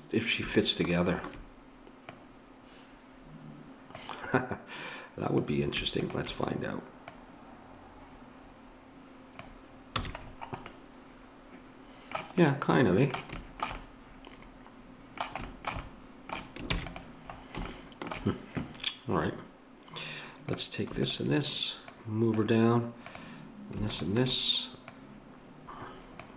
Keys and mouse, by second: 5.2-9.4 drag, 10.0 a, 16.8 ctrl+s, 20.6-26.3 drag.